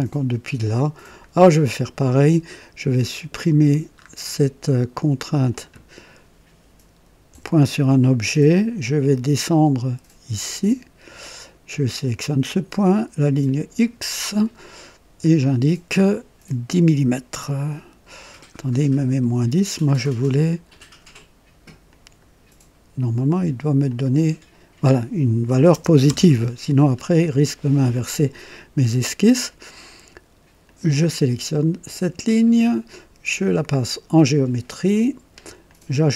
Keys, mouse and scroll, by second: 1.8 click, 3.9-4.2 scroll up 1, 5.4 click, 7.3 Delete, 9.4-11.3 drag, 12.0 click, 13.4 click, 15.2 click, 19.1 Escape, 20.6 click, 21.8 click, 23.8 click, 25.4 KP_1, 25.8 KP_0, 26.0 KP_Enter, 26.8-27.2 scroll down 1, 27.3-27.9 right drag, 30.6 click, 33.5 click, 35.6 click.